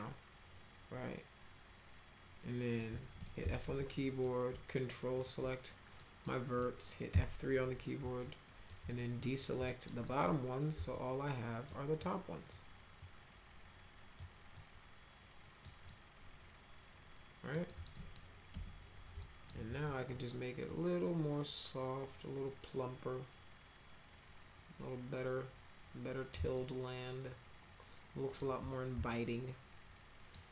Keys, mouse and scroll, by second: 3.0 middle drag, 3.1-4.1 typing, 4.0 middle drag, 5.1 ctrl+click, 5.7 middle drag, 6.2-6.6 middle drag, 7.1 F3, 8.2 alt+click, 8.9 middle click, 9.2 middle click, 9.6 middle click, 10.0 middle click, 10.9 alt+click, 12.0 alt+click, 13.0-14.2 alt+drag, 14.6-15.6 alt+drag, 15.9 alt+right click, 15.9-17.5 alt+middle drag, 17.7 alt+middle click, 17.9 middle click, 18.5 F3, 19.2 alt+middle click, 19.7 w, 20.7-26.3 drag, 26.5-28.4 alt+middle drag, 29.1-30.3 alt+middle drag.